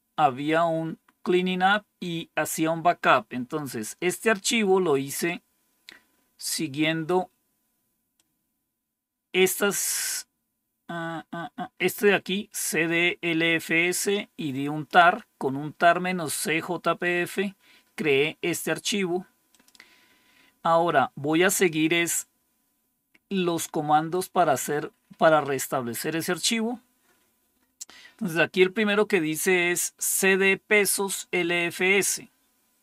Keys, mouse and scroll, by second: 1.4-3.7 scroll down 1, 4.9-6.3 scroll down 2, 6.3-8.1 scroll down 1, 8.1-9.3 drag, 9.8-12.0 scroll down 3, 12.0-13.5 scroll down 1, 13.5-14.8 drag, 19.4 click, 20.0-20.5 scroll down 2, 23.4-24.4 scroll down 2, 24.4-29.5 scroll down 1, 29.5-31.1 scroll down 1, 31.1 click.